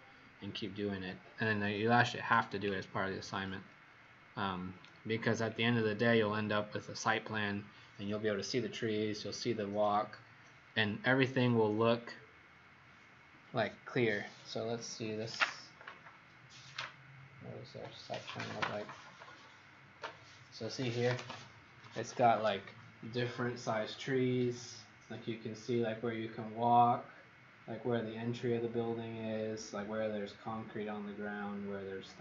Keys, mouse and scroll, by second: 3.5-4.0 scroll up 3, 5.0 scroll down 1.